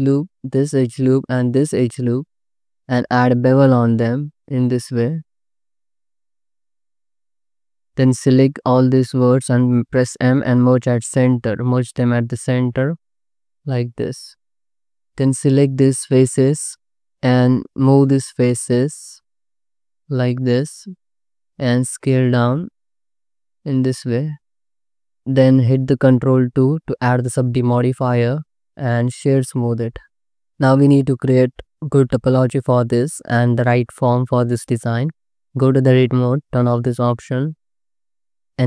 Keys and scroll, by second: 2.8 ctrl+b, 7.3 1, 10.2 m, 16.2 3, 21.3 s, 23.4 s, 25.0 alt+z, 25.2 Tab, 26.6 ctrl+2, 27.3 alt+shift+z, 34.5 Tab.